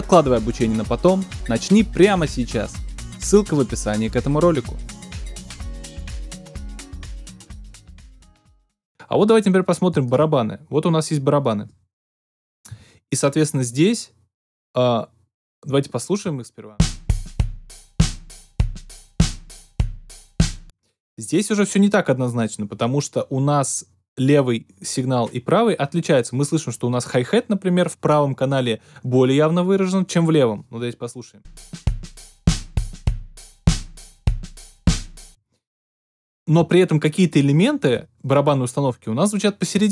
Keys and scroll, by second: 16.7 alt+super+space, 20.5 alt+super+space, 31.4 space, 35.2 space.